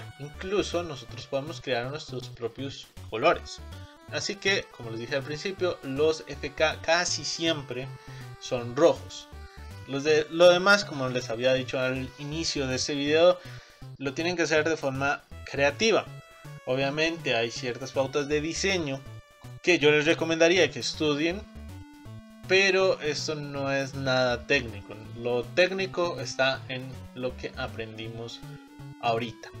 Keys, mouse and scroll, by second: 9.6 click, 27.3-28.1 scroll down 4, 28.1-29.6 middle drag.